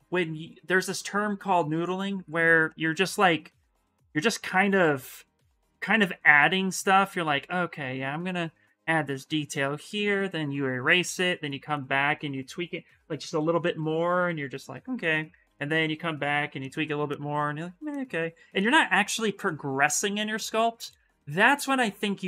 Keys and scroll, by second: 3.8 s, 12.8 b, 13.1 v, 14.9 s.